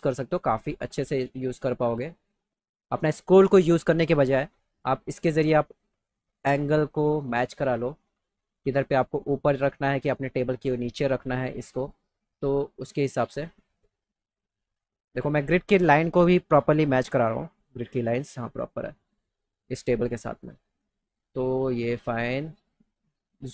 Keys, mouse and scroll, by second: 0.8 click, 1.5-2.5 drag, 5.3-7.2 drag, 8.1 click, 13.4-15.3 drag, 22.0 click.